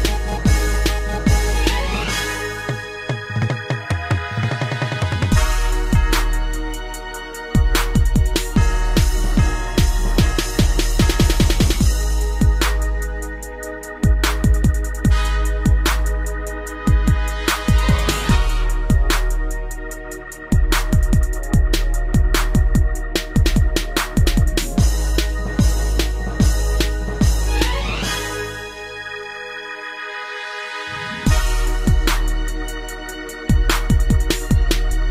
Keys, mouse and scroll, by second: 0.0 Return, 1.4-3.4 typing, 1.5 Up, 3.7 Return, 4.4 Down, 4.8 Down, 5.9-7.4 typing, 7.9 Return, 8.3 Left, 8.6 Left, 8.8 Left, 9.5 Down, 10.0 shift+space, 10.9 Escape, 11.7 scroll down 2, 12.0 middle click, 12.3 shift+space, 13.3 Escape, 13.8 middle click, 14.0 middle click, 14.2 shift+space, 15.0 Escape, 16.4 shift+click, 17.4 g, 18.3 click, 19.2 shift+click, 19.8 g, 20.6 click, 21.0 shift+space, 22.5 Escape, 22.8 middle click, 23.0 shift+space, 24.1 Escape, 25.4 shift+click, 26.4 shift+click, 27.2 g, 27.8 click, 28.8 click, 29.5 click, 29.7 click, 31.6 click, 34.0 ctrl+c, 34.5 Up, 34.7 ctrl+v.